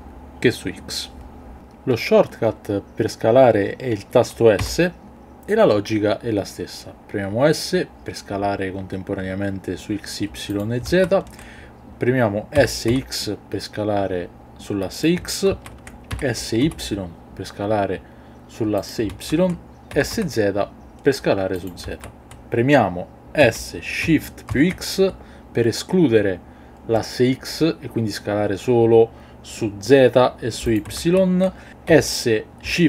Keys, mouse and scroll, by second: 10.5 click, 10.9 ctrl+z, 12.5 s, 12.8 x, 15.5 ctrl+z, 16.1 s, 16.6 y, 18.8 click, 19.1 ctrl+z, 19.9 s, 21.6 click, 21.8 ctrl+z, 23.4 s, 24.4 shift+x, 30.6 click, 31.0 ctrl+z, 31.9 s.